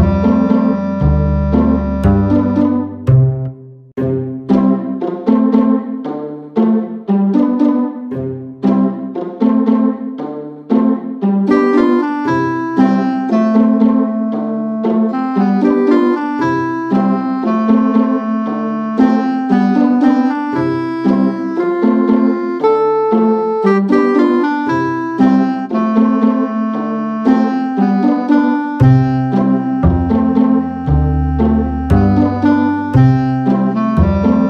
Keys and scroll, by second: 5.1 alt+shift+super+z, 7.2 super+f, 12.1 super+[, 16.5 BackSpace, 16.9 BackSpace, 23.1 BackSpace, 24.1 Right, 24.3-25.8 typing.